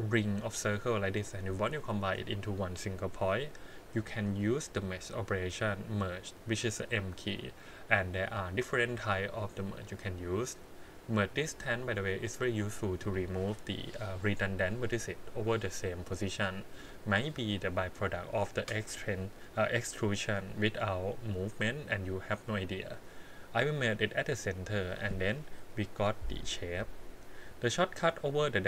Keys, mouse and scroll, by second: 4.2-24.5 drag.